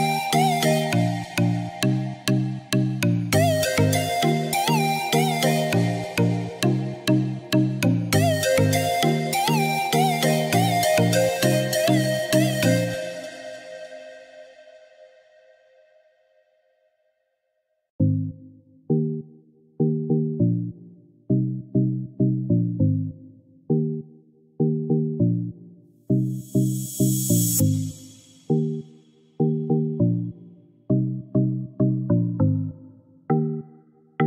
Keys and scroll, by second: 3.6 ctrl+g, 15.7 ctrl+g.